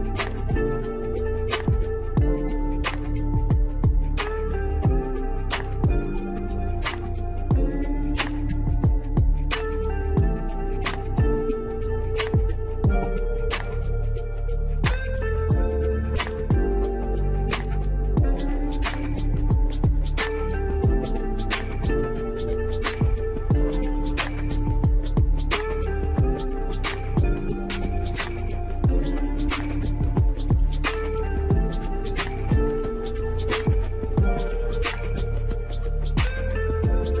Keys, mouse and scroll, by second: 1.5 click, 2.4 scroll up 2, 3.3 KP_1, 3.9 shift+middle click, 4.4 s, 6.0 scroll up 4, 6.3 middle click, 6.8 scroll down 1, 7.2 g, 8.7 KP_1, 9.5 s, 13.4 click, 13.5 scroll down 3, 13.8-14.7 middle drag, 14.7 scroll down 3, 14.8 shift+middle drag, 15.1-15.6 scroll up 3, 15.6 scroll down 1, 15.8-17.3 middle drag, 17.7 scroll down 1, 17.9-19.0 middle drag, 19.0-19.5 scroll up 4, 19.5-20.1 middle drag, 20.1 KP_1, 20.5-21.6 scroll down 2, 20.7 shift+middle click, 21.6 click, 22.0 drag, 22.3 click, 22.4 ctrl+click, 22.7-23.7 right drag, 23.7 g, 24.6 ctrl+z, 25.6 g, 26.9 click, 27.3 g, 28.1-28.4 scroll up 2, 28.4 shift+middle click, 29.1 g, 30.6 drag, 30.7-31.6 scroll down 3, 31.0 shift+middle drag, 31.6-32.5 middle drag, 32.5-33.5 scroll up 1, 33.5 shift+a, 35.5 s, 36.8-37.2 middle drag.